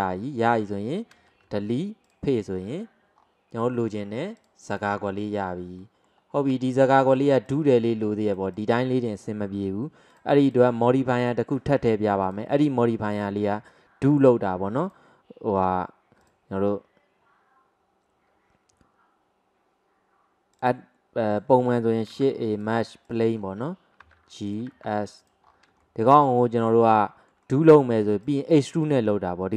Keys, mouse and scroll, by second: 0.1 scroll up 1, 0.5 scroll down 1, 1.5 Delete, 2.6 scroll down 3, 3.2 scroll up 1, 4.4-5.1 drag, 5.1 scroll down 1, 5.5-5.9 scroll up 2, 5.9-7.2 middle drag, 7.2 drag, 7.5 click, 8.3 click, 8.6 click, 10.1 click, 10.9 click, 12.3 drag, 12.6 click, 14.1-14.9 scroll down 1, 14.9 click, 15.9-16.3 scroll up 1, 16.3 drag, 16.9-18.9 scroll up 1, 21.1 click, 22.1 shift+a, 23.4 scroll down 4, 24.1 g, 24.7 s, 25.5-25.9 scroll up 3, 25.9-26.4 shift+middle drag, 26.7 click, 26.9-28.3 middle drag, 28.3 click, 28.5 click, 28.8 click.